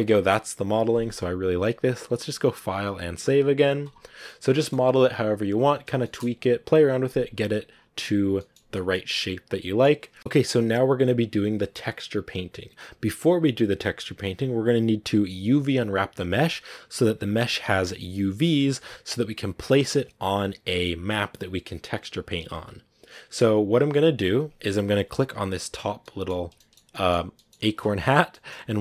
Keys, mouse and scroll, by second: 5.4-5.9 scroll up 1, 5.9-8.4 shift+middle drag, 8.4-8.8 scroll up 2, 8.8-25.7 middle drag, 25.7 right click, 25.9 middle click, 26.2 scroll up 2, 26.4-28.8 shift+middle drag.